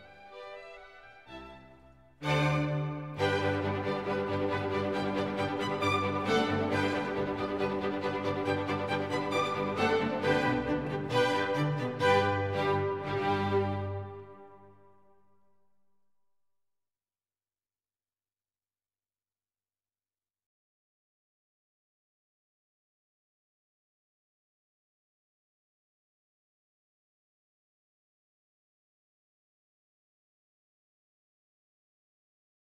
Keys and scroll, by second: 8.8 Escape, 13.1 Escape, 20.8 Escape, 32.0 Escape.